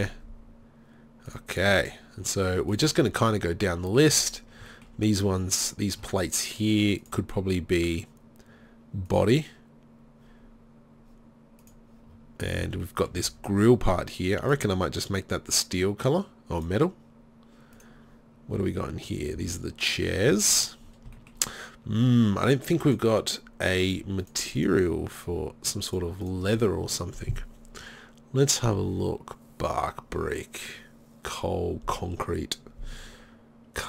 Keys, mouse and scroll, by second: 0.4-1.3 middle drag, 1.3-3.9 drag, 4.7 middle click, 7.0-11.1 drag, 11.1 middle click, 12.7 z, 12.9 click, 13.2 z, 17.8 middle click, 18.6-19.8 drag, 18.6 z, 19.4 z, 20.4 z, 23.9 middle drag.